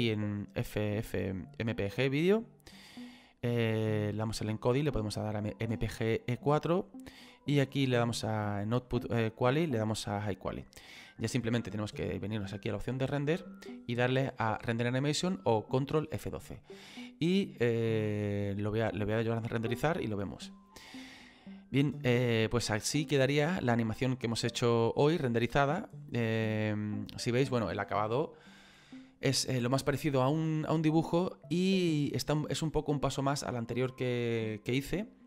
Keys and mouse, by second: 1.9 click, 4.0 click, 7.4 click, 9.6 click, 12.8 click.